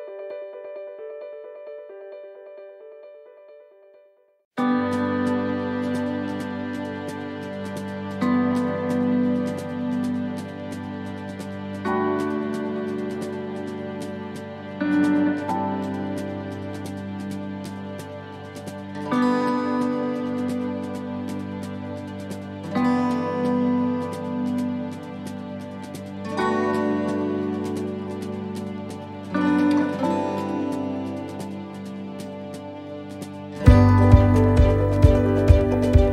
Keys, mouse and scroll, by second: 1.0 click, 3.4 scroll up 4, 3.8 middle click, 5.3 click, 6.1 middle click, 7.2 right click, 7.8 shift+right click, 9.1 shift+right click, 9.5 shift+right click, 10.3 shift+right click, 10.9 shift+right click, 11.1 scroll up 3, 11.7 shift+middle click, 12.1 scroll up 2, 12.4 middle click, 12.6 shift+right click, 12.7 shift+right click, 13.3 shift+right click, 16.6 shift+right click, 17.3 shift+right click, 17.6 shift+middle click, 19.3 shift+middle click, 20.4 shift+right click, 20.7 shift+right click, 21.2 middle click, 21.6 scroll down 2, 22.9 s, 27.4 middle click, 28.9 scroll down 2, 29.3 middle click, 30.6 click, 31.0 middle click, 32.6 scroll down 3, 33.0 middle click, 33.5 shift+middle click, 34.1 scroll up 2, 34.5 middle click, 34.8 shift+middle click, 35.5 scroll down 1, 35.9 middle click.